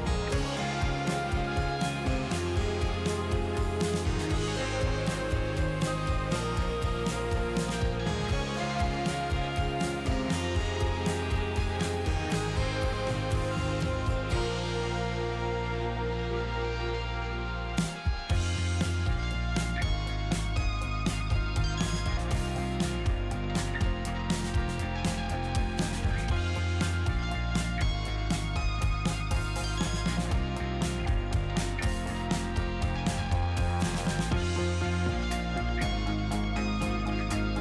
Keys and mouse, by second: 0.5 Tab, 4.5 click, 4.7 F4, 5.3 Tab, 5.7 click, 6.2 ctrl+z, 8.2 click, 9.0 click, 9.6 middle click, 10.1 ctrl+z, 11.7 ctrl+z, 12.5 click, 13.1 click, 13.6 ctrl+z, 13.8 click, 14.1 ctrl+z, 14.9 click, 16.0 click, 16.8 ctrl+z, 18.0 click, 22.0 middle click, 22.7 click, 23.1-24.4 middle drag, 25.2 middle click, 26.2 click, 26.6 middle click, 27.0 ctrl+z, 27.3 middle click, 30.7 click, 32.4 click, 33.9 middle click, 34.3 click, 34.7 ctrl+z, 35.6 click, 36.8 click.